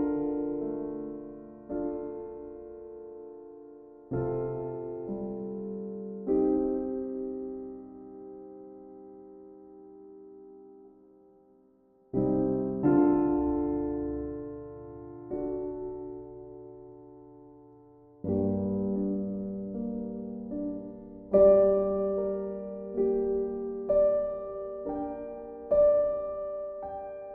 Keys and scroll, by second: 16.3 v, 17.0 b, 21.0 ctrl+z.